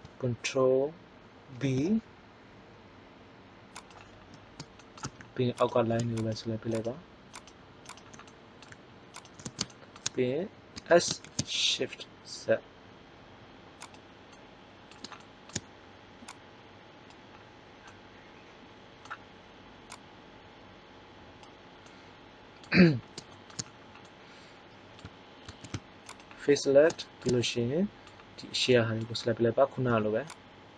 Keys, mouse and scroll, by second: 1.4 ctrl+b, 8.2 middle click, 10.7 s, 19.8-21.7 drag, 21.8 middle click, 25.6 ctrl+Tab, 29.8 c.